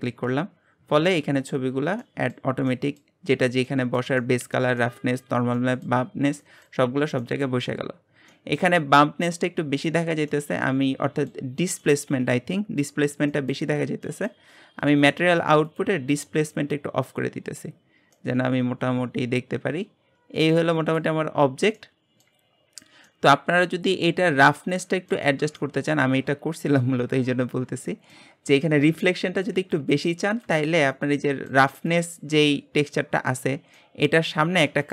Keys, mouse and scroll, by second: 1.2 scroll down 10, 1.4-6.7 middle drag, 6.7-7.2 scroll up 4, 7.2-7.6 shift+middle drag, 7.6-8.3 scroll up 3, 8.3-15.0 shift+middle drag, 15.0 click, 15.9 click, 16.7 click, 18.1-21.3 middle drag, 23.0-28.2 middle drag, 28.2-28.6 scroll up 4, 28.6-31.8 shift+middle drag, 31.8-34.9 drag.